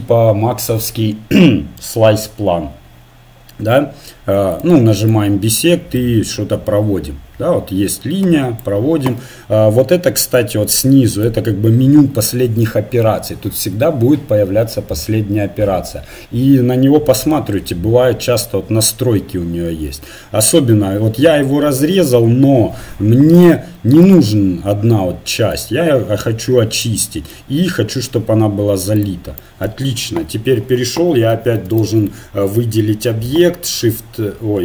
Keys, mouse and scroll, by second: 5.0-6.9 drag, 10.3-12.2 drag, 12.3 middle click, 20.3-22.6 middle drag, 23.3-27.3 drag, 27.3-28.9 middle drag, 28.9-30.1 drag, 30.1 KP_1, 31.0 a, 31.4 a, 33.7 shift+r.